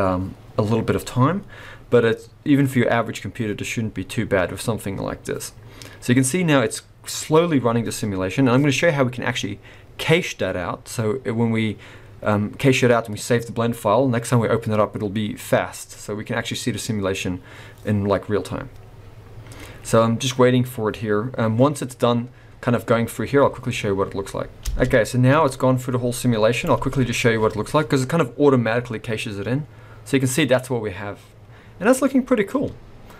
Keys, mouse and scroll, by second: 24.6 space, 25.3 click, 26.7 space, 31.8-33.0 scroll down 1, 33.0 middle click.